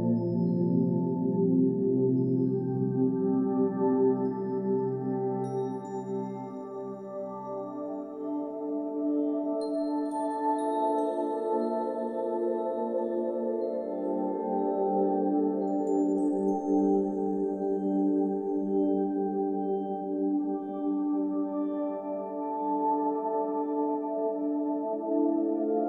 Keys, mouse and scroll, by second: 0.7 click, 0.9 scroll up 7, 1.2 ctrl+s, 1.3 click, 1.5 scroll down 1, 1.6 shift+middle click, 1.7 shift+middle click, 1.7 scroll up 4, 1.8 middle click, 1.9 scroll down 1, 1.9 shift+middle click, 2.1 middle drag, 2.5 click, 2.5 shift+d, 2.6 g, 2.7 shift+middle drag, 2.9 g, 3.4 shift+click, 3.6 ctrl+j, 3.7 shift+middle drag, 3.8 scroll down 1, 4.1 shift+click, 4.4 g, 4.5 click, 4.7 shift+d, 4.8 s, 4.9 shift+middle drag, 5.3 shift+middle drag, 5.6 middle drag, 5.8 click, 5.9 g, 6.0 click, 6.1 middle click, 6.5 shift+d, 6.8 click, 7.0 s, 7.1 s, 7.3 middle click, 7.9 click, 8.2 r, 8.7 r, 9.2 click, 9.4 click, 9.5 r, 9.8 click, 10.0 r, 12.1 shift+middle click, 12.6 click, 12.7 shift+middle drag, 13.0 scroll down 2, 13.0 middle click, 13.2 click, 13.2-15.7 typing, 13.5 click, 13.7 middle click, 13.8 ctrl+s, 13.9 shift+middle click, 13.9 scroll up 2, 14.9 click, 15.5 click, 15.5 middle click, 15.7 click, 15.7 middle click, 15.9 shift+middle click, 16.5 right click, 16.7 ctrl+z, 17.1 click, 17.9-18.9 typing, 18.3 click, 18.4 scroll up 2, 18.5 scroll down 2, 18.5 shift+middle click, 19.2 click, 20.0 x, 20.0 shift+a, 20.4 click, 20.6 s, 20.8 scroll down 2, 20.8 scroll up 1, 21.6 click, 21.7-23.5 typing, 21.9 click, 22.3 middle click, 23.3 shift+click, 24.2 click, 24.3 middle click, 24.4 click, 24.5 shift+a, 24.8 s, 25.0 middle click, 25.1 click, 25.3 middle click, 25.5 r, 25.7 middle click, 25.8 click.